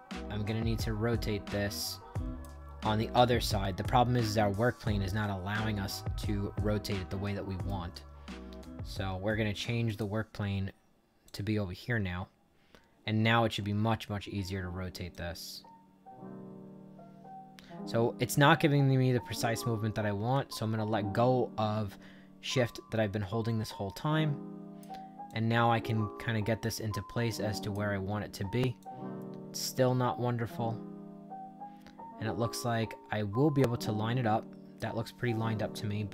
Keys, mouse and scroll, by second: 2.9-7.6 right drag, 9.8 click, 11.2 click, 15.0-24.7 shift+drag, 25.2-27.6 drag, 28.7-34.7 drag.